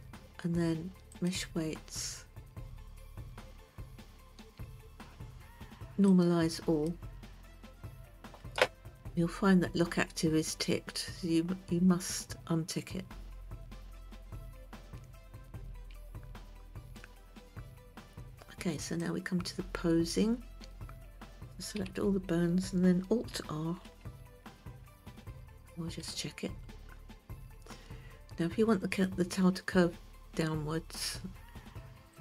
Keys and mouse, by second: 1.6-7.4 drag, 16.3 Tab, 19.5 click, 22.3 a, 24.4 alt+r, 25.9-26.6 shift+middle drag.